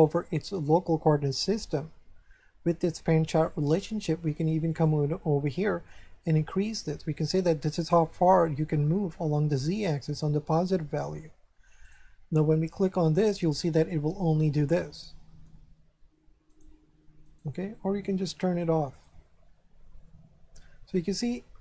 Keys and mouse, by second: 4.6 click, 5.8 click, 11.8 right click, 12.8 r, 16.4 right click, 18.9 click, 20.0 shift+middle click.